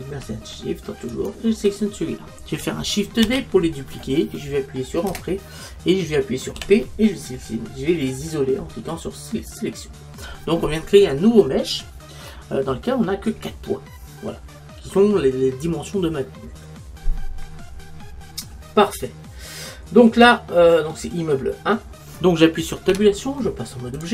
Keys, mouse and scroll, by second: 3.3 shift+d, 6.8 p, 22.9 Tab.